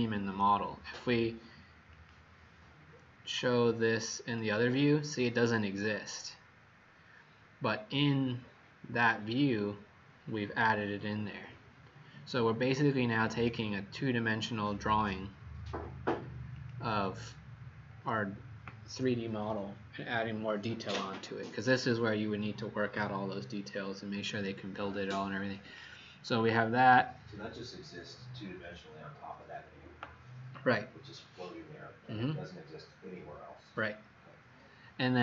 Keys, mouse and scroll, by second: 2.0 click, 5.0-5.9 scroll up 5, 5.9-7.8 scroll up 1, 9.2 click.